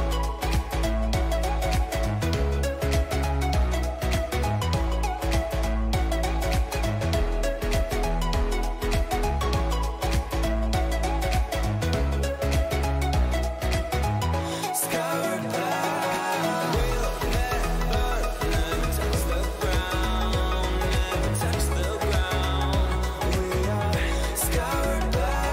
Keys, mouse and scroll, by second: 1.6 Delete, 5.0-7.3 middle drag, 7.3 b, 9.7 Delete, 12.5-16.8 middle drag, 15.2 b, 17.5-18.6 middle drag, 18.9 Delete, 23.8 a, 24.1 a, 25.0-25.5 right drag.